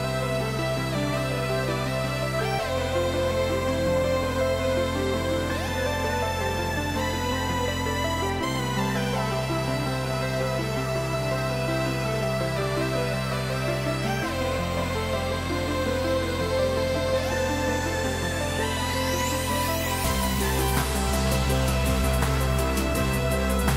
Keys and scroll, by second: 0.8 ctrl+l.